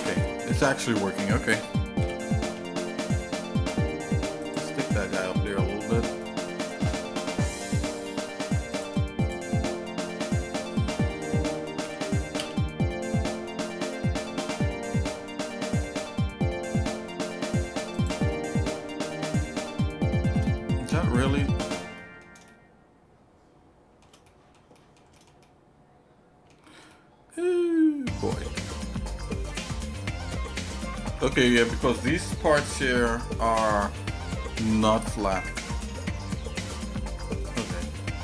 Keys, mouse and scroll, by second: 0.5 ctrl+z, 2.0 g, 4.8 shift+middle click, 5.3 middle click, 5.7-6.2 scroll down 2, 6.2 middle click, 6.8 shift+middle click, 7.6-8.7 scroll up 4, 8.7 click, 9.2 shift+click, 9.6 shift+middle click, 11.8 g, 18.3-20.4 shift+middle drag, 20.6 middle click, 21.0 middle click, 21.4 scroll down 2, 22.0 middle click, 22.5-24.0 shift+middle drag, 24.2 middle click, 24.7 middle click, 25.1 shift+middle click, 25.4-26.5 shift+middle drag, 26.9-29.4 shift+middle drag, 30.1 shift+middle click, 31.0 scroll down 1, 31.9 middle click, 32.9 middle click, 33.3 scroll down 2, 33.9 shift+middle click, 35.4 shift+middle click, 36.2 middle click, 36.6 shift+middle click, 37.4 middle click, 37.9 middle click.